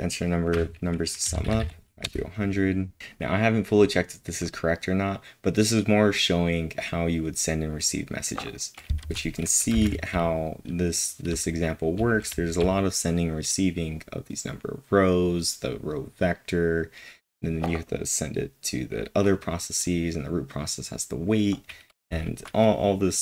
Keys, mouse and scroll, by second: 2.0 Return, 9.6-11.2 typing, 22.0-23.2 typing.